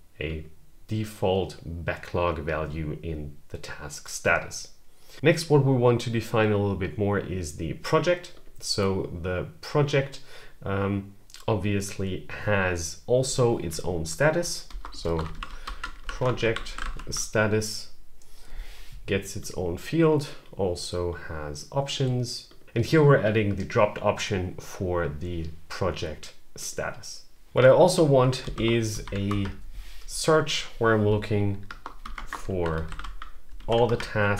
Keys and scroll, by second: 14.2-16.7 typing, 18.5-19.3 typing, 28.2 shift+/, 28.7 End, 29.1 Return, 31.4-33.1 typing, 33.4 Down, 33.7 Return.